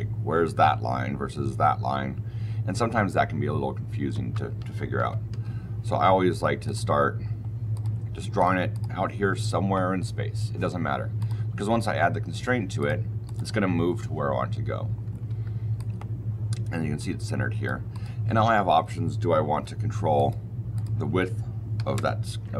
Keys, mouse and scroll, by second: 4.0 Escape, 4.9 ctrl+z, 5.2 ctrl+z, 6.5 click, 7.6 click, 8.3 click, 8.6 click, 11.1 click, 12.7 click, 13.2 click, 15.2 Escape, 15.7 click, 17.8 click, 19.4 d, 20.1 click, 20.6 click, 21.7 KP_2, 21.8 KP_Enter.